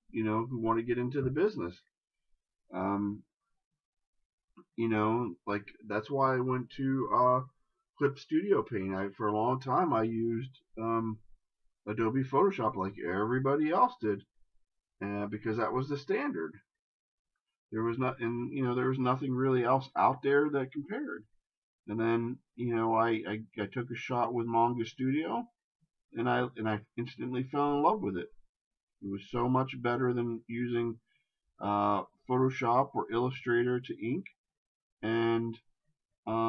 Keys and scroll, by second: 17.4 shift+space.